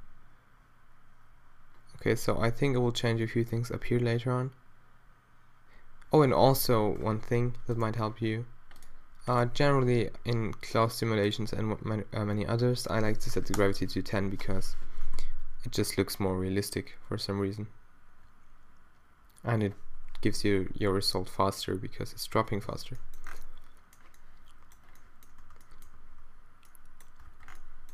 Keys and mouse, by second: 7.6 alt+a, 11.0-15.0 drag, 14.4 shift+Left, 15.2 alt+a, 22.8 alt+a, 23.0 click, 27.4 alt+a, 27.6 alt+a.